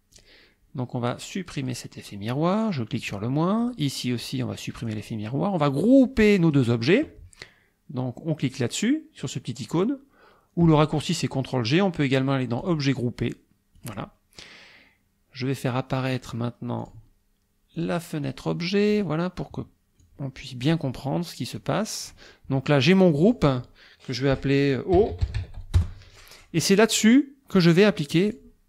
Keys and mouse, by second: 0.1 click, 1.7 click, 3.0 click, 3.6 click, 4.8 click, 5.7-6.7 drag, 12.6 click, 13.8 click, 16.8 click, 17.8 click, 18.3 click, 20.0 click, 21.6 click, 23.1 click, 24.7-25.9 typing, 28.3 click.